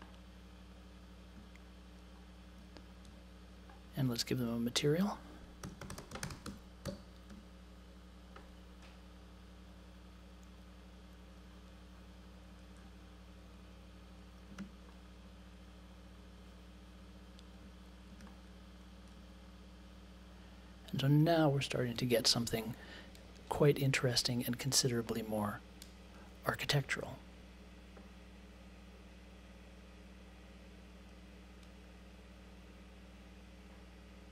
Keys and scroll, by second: 5.3-7.8 typing, 14.5 space.